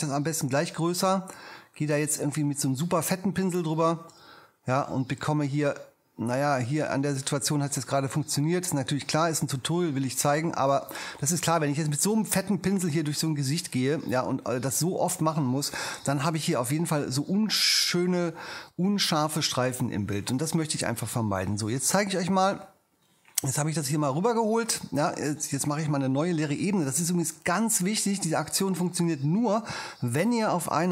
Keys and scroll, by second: 30.1 shift+super+n.